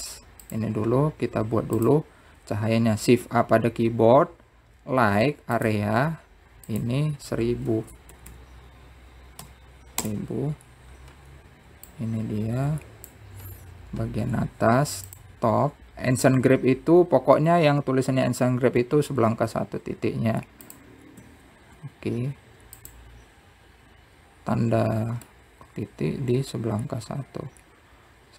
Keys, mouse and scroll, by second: 1.0 click, 2.5 shift+a, 6.0-7.6 drag, 7.6 KP_0, 11.2 click, 18.1 s, 20.5 s, 24.6-27.7 middle drag.